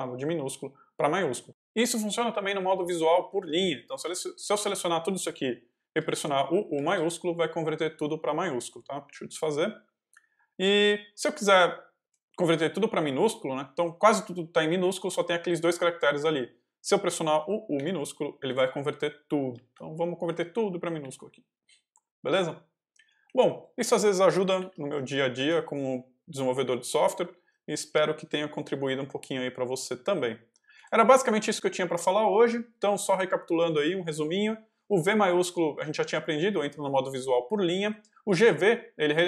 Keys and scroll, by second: 2.4-3.9 typing, 6.6 shift+u, 8.9 u, 11.1 shift+v, 12.0 j, 17.6 u, 19.5 shift+v, 20.6 shift+j, 20.9 u, 22.9 j.